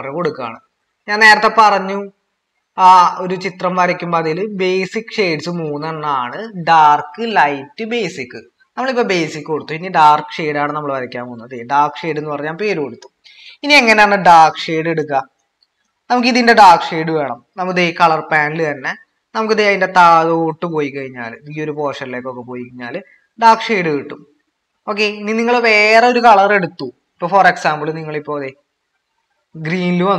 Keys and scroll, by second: 0.0-0.2 typing, 1.3 typing, 2.4-3.0 typing, 4.1-6.3 typing.